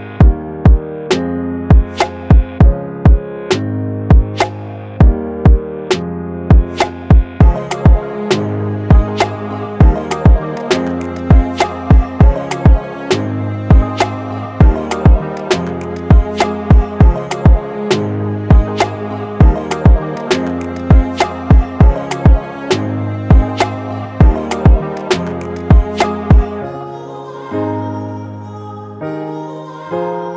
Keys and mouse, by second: 0.9 s, 4.3 Delete, 4.9 middle click, 5.8 click, 19.2-21.7 middle drag, 21.8-25.6 middle drag, 26.8-28.0 middle drag, 28.5-30.3 middle drag.